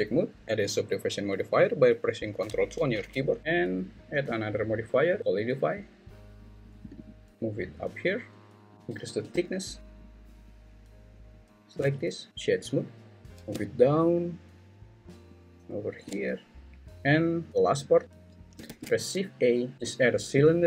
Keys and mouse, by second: 0.2 middle click, 0.4 middle click, 2.8 ctrl+2, 4.4-5.3 drag, 6.9-8.3 drag, 9.6-11.7 shift+drag, 12.3-13.2 right drag, 13.4 alt+z, 13.4 g, 16.7 `, 16.9 alt+z, 18.7 shift+a.